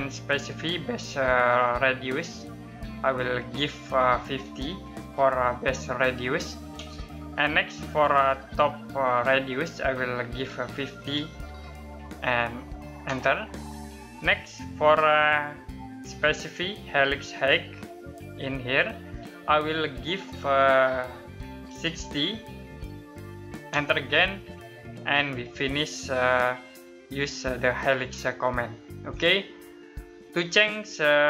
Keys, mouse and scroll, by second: 4.0-4.5 typing, 6.3 space, 10.5-11.6 typing, 12.6 space, 21.0-22.2 typing, 23.3 space, 24.9 middle click, 26.2-26.7 scroll up 1, 27.4 middle click.